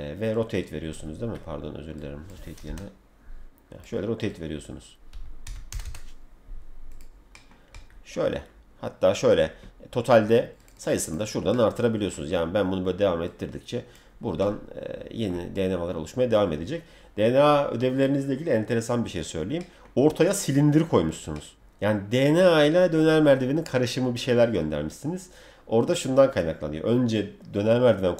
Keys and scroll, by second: 2.6 0, 5.4 1, 5.7 0.